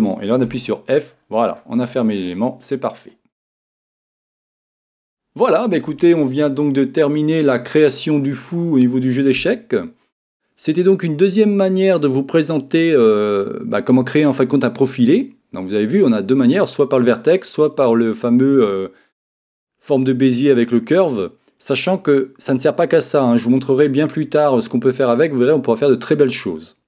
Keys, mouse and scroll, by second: 0.5 f, 1.1-8.1 middle drag.